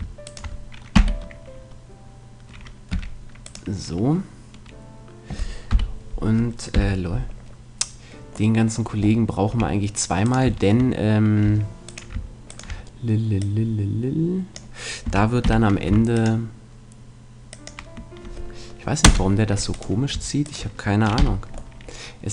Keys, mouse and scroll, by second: 0.9 j, 2.9 g, 5.7 KP_1, 6.7 KP_3, 8.5 middle click, 9.5 a, 10.3-12.9 right drag, 11.5 a, 14.2-15.2 drag, 15.1 a, 15.5 k, 19.7-21.7 right drag, 21.2 j, 21.7 middle click.